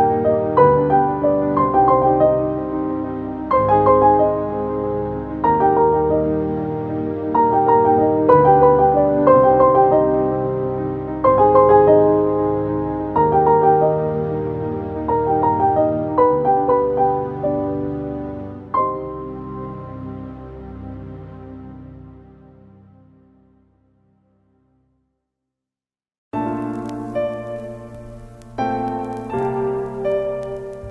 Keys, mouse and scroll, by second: 0.9 click, 2.4 Caps_Lock, 2.7-6.1 typing, 3.0 Caps_Lock, 5.4 Caps_Lock, 5.9 Caps_Lock, 7.4-8.1 typing, 11.6 click, 12.6 i, 13.3-22.3 drag, 30.2 click, 30.5-30.9 alt+drag.